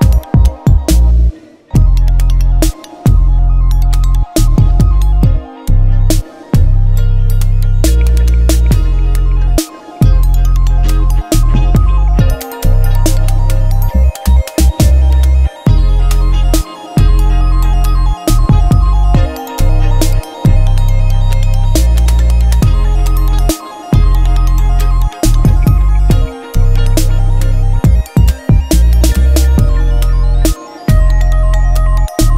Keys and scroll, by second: 3.8 Return, 4.7 ctrl+t, 5.1 Down, 6.1 Down, 6.5 Right, 7.4 Up, 7.7 Return, 9.5 Down, 10.9 t, 12.1-15.1 typing, 15.6 Left, 16.8-21.6 typing, 17.3 Right, 18.2 Left, 19.1 Right, 19.4 Right, 22.7 2, 23.6 3, 23.9 Return, 24.7 6, 25.9-29.7 typing, 29.1 ctrl+Return, 29.8 Right, 31.9 ctrl+t.